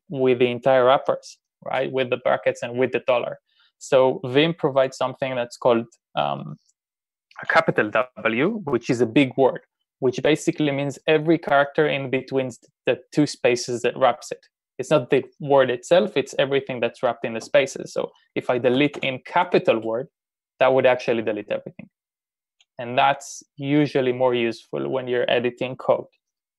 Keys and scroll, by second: 18.6-19.9 typing, 23.0 u.